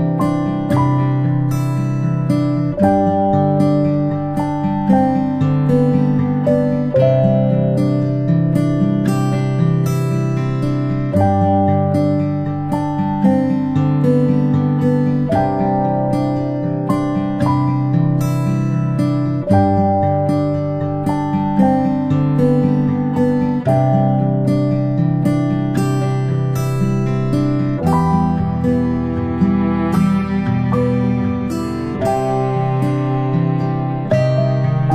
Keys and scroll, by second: 4.3 space, 4.5 space, 16.8 ctrl+a, 17.8 Delete, 21.3 Delete, 31.3-31.7 ctrl+space.